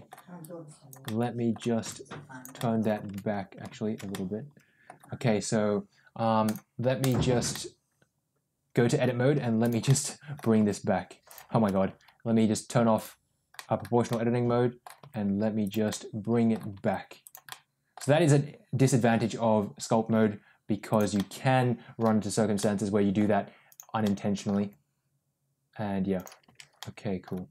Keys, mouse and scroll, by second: 0.3 click, 0.9 middle click, 1.7 click, 2.4 middle click, 3.0 ctrl+z, 4.0 middle click, 6.4 click, 7.4-8.9 middle drag, 9.7 middle click, 10.4 g, 11.4 ctrl+z, 12.8 click, 13.4 middle click, 14.0 middle click, 14.9 g, 15.8 middle click, 16.6 g, 17.3 middle click, 17.9 g, 21.0 middle click, 22.5 middle click, 23.6 click, 23.9 middle click, 24.4 g, 26.3 ctrl+z, 26.7 middle click, 27.4 g.